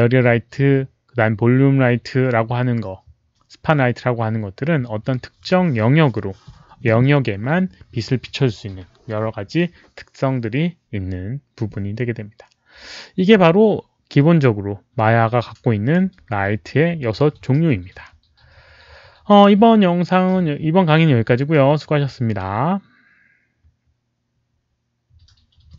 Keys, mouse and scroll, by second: 15.4-15.9 drag, 25.7 click.